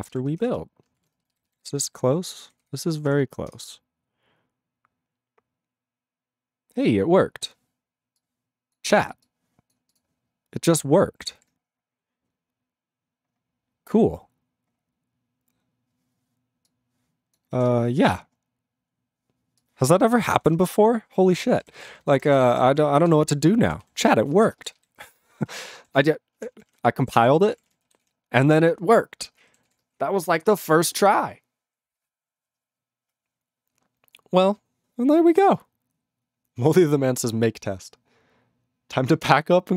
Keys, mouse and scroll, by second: 10.7 click, 10.7 click, 11.4 ctrl+s, 11.7-12.1 scroll up 8, 12.5-12.8 scroll, 13.3-14.7 scroll, 14.7-15.4 scroll, 16.7 click, 17.3 click, 17.7 ctrl+w, 18.1 scroll down 1, 18.1-18.9 scroll, 18.9-19.6 scroll, 19.6 scroll, 19.6 click, 20.2 click, 20.6 ctrl+w, 21.6 ctrl+k, 21.7 ctrl+n, 21.9 ctrl+n, 22.0 ctrl+n, 22.1 ctrl+n, 22.3 ctrl+n, 22.4 ctrl+space, 22.5 ctrl+n, 22.5 ctrl+w, 22.7 ctrl+e, 23.2 ctrl+s, 23.8 ctrl+s, 24.5 ctrl+space, 24.9 ctrl+alt+b, 25.0 ctrl+g, 25.3 ctrl+s, 25.5 ctrl+a, 25.9 ctrl+s, 26.4 ctrl+p, 26.5 ctrl+p, 26.7 ctrl+p, 26.8 ctrl+e, 27.2 ctrl+s, 27.4 ctrl+a, 27.4 ctrl+p, 27.5 ctrl+p, 27.7 ctrl+d, 28.1 ctrl+s, 29.6 ctrl+s.